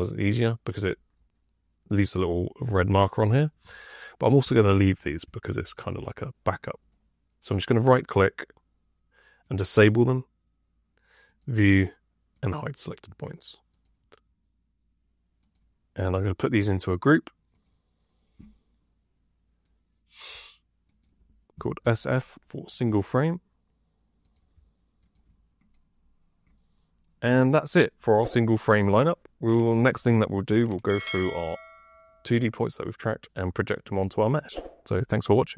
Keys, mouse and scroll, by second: 21.4 s, 21.7 f.